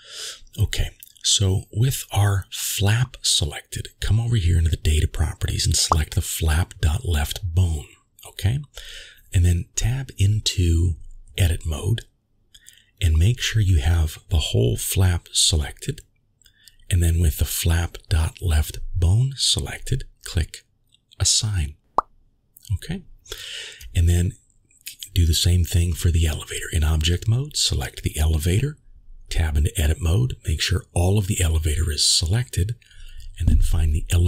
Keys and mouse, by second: 0.4 click, 1.1 click, 1.8 middle drag, 2.5 middle click, 12.0 click, 14.8 click, 15.2 click, 22.1 a, 24.3 click, 25.3 Tab, 26.5-27.1 drag, 28.8-30.1 middle drag, 30.8 3.